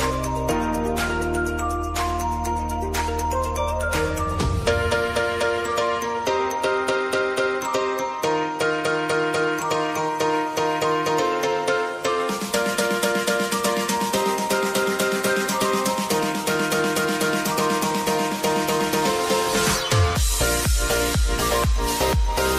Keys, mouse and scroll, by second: 2.6 Return, 3.3 click, 4.0 ctrl+a, 4.9 s, 5.6 click, 6.6 Return, 8.0 click, 12.3 ctrl+a, 13.4 click, 18.3 Return, 18.6-22.5 drag.